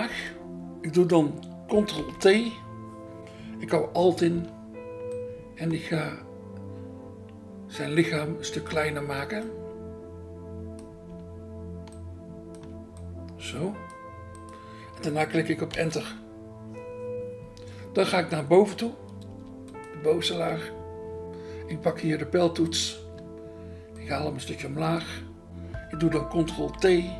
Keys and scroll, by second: 0.1 BackSpace, 2.0 ctrl+t, 15.8 Return, 19.4 BackSpace, 20.3 BackSpace, 23.0 BackSpace, 26.7 ctrl+t.